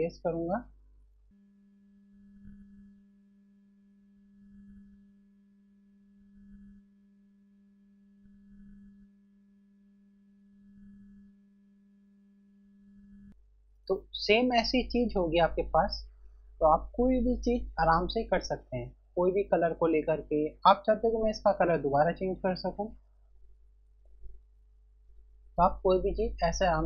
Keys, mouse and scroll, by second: 0.2 click, 2.5-3.6 typing, 2.6 click, 3.7 click, 5.1 ], 5.3 click, 7.2-9.2 typing, 7.4 click, 8.1 scroll down 1, 8.3 click, 8.7 click, 9.4 click, 11.6-12.7 typing, 11.8 click, 12.8 click, 13.2 scroll down 1.